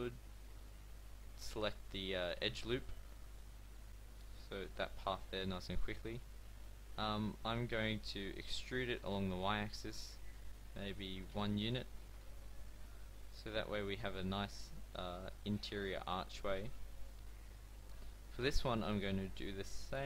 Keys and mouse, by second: 8.4 e, 12.6-15.4 middle drag, 19.1 middle click.